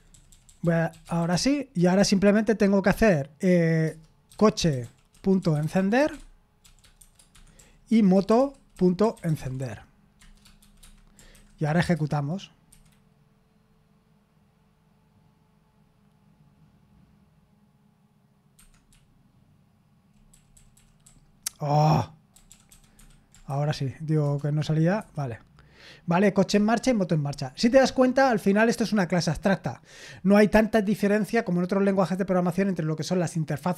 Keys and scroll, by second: 9.9-11.7 typing, 23.6 typing, 26.6 Escape.